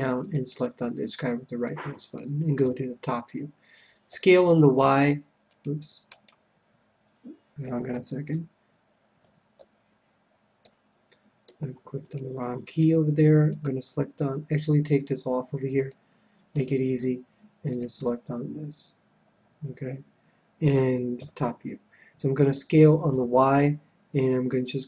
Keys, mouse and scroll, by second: 0.2-1.7 right drag, 1.2-2.5 middle drag, 2.5 KP_7, 4.1 s, 6.2-7.9 right drag, 7.9 ctrl+z, 10.6 ctrl+z, 10.6 middle click, 10.9 click, 11.0-12.2 middle drag, 12.0-15.2 right drag, 14.9-16.4 drag, 15.8-17.5 middle drag, 17.6-19.4 right drag, 21.1 KP_7, 22.5 s.